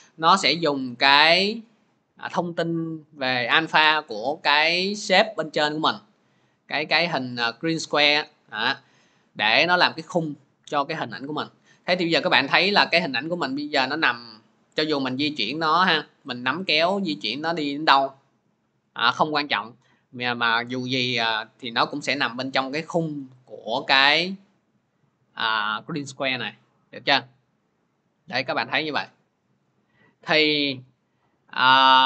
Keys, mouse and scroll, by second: 0.8-9.9 drag, 11.2-21.3 drag, 23.2-28.2 drag, 29.5 click, 30.7 ctrl+z.